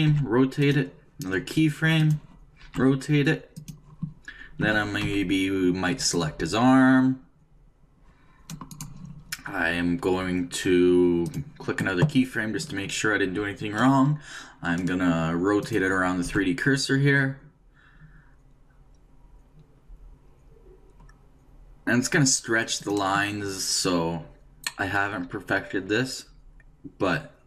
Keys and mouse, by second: 0.1 r, 2.0 click, 2.6 r, 4.6 a, 5.1 c, 11.2-13.0 drag, 15.6-17.4 drag, 16.2 r.